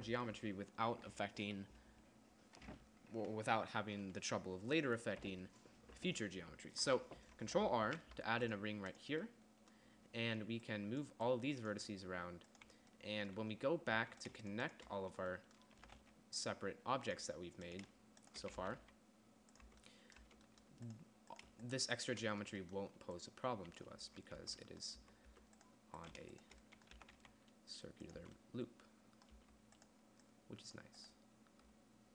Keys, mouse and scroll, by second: 8.3 ctrl+r, 9.7-11.0 drag, 14.4 a, 15.9 click, 16.2 g, 19.0 g, 20.1 Tab, 20.6 Tab, 24.4 Tab, 24.8 Tab, 25.4 Tab, 25.7 Tab, 27.4 g, 28.6 Tab, 29.8 Tab.